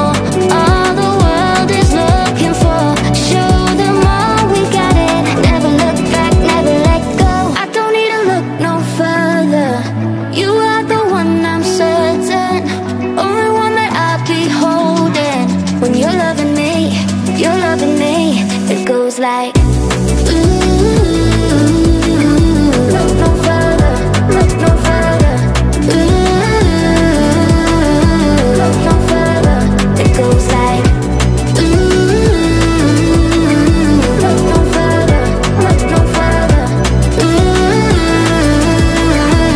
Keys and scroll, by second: 4.9 space.